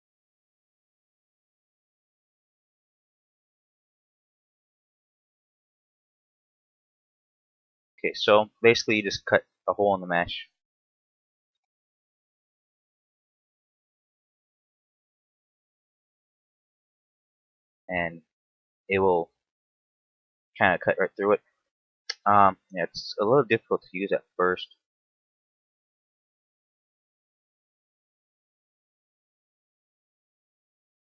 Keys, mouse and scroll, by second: 2.1 middle click, 5.5 middle click, 7.4 middle click, 8.6 middle click, 9.2 k, 14.3 middle click, 17.0 scroll down 2, 17.3 middle click, 18.9 KP_7, 19.8 z, 20.3 shift+middle click, 20.6 scroll up 2, 21.4 k, 30.6 middle click.